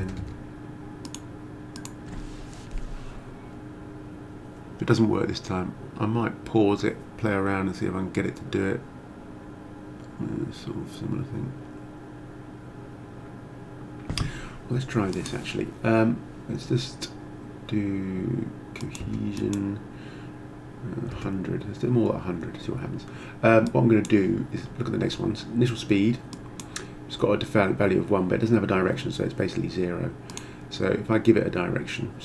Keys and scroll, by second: 0.0-0.5 typing, 19.1 0, 21.1 0.